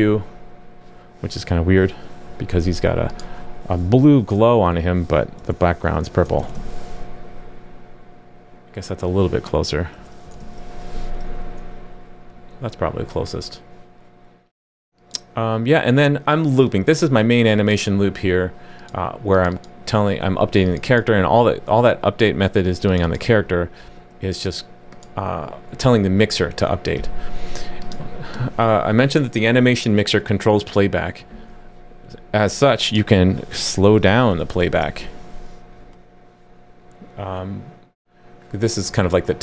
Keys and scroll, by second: 6.6 super+s, 10.4 super+s, 34.6 super+s.